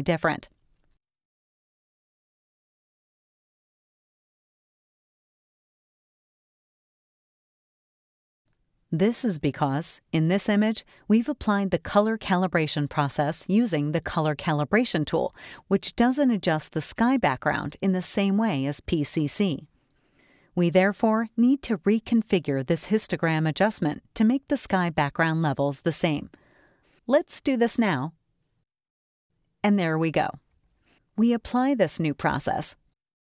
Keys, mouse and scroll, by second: 0.9 click, 2.3 middle click, 2.4 click, 3.1 click, 4.5 click, 6.2 click, 8.4 click, 10.1 click, 16.8 click, 17.9 ctrl+a, 21.4 click, 26.3 click, 27.9-31.6 drag, 31.6 scroll up 1, 32.6-33.3 drag.